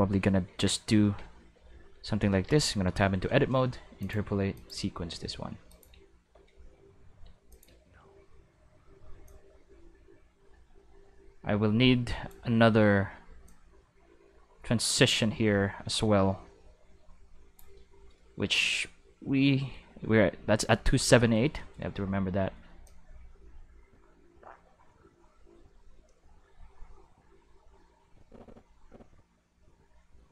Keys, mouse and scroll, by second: 0.5 Tab, 1.0 a, 1.5 q, 2.9 a, 4.0 click, 4.6 click, 5.7 click, 6.1 q, 6.5 space, 7.2 space, 7.5 click, 7.7 space, 9.1 space, 9.3-12.3 drag, 13.5-17.6 drag, 18.2-19.7 middle drag, 21.1 middle click, 22.1 middle click, 22.6 middle click, 22.9-30.3 drag.